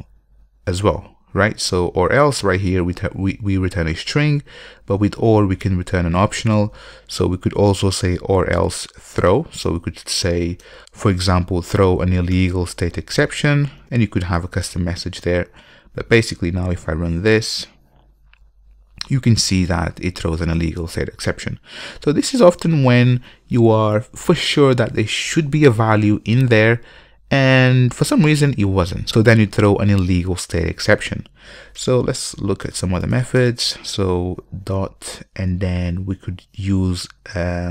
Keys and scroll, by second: 10.8 Return, 14.0 Return, 17.6 ctrl+F5, 32.0 alt+BackSpace.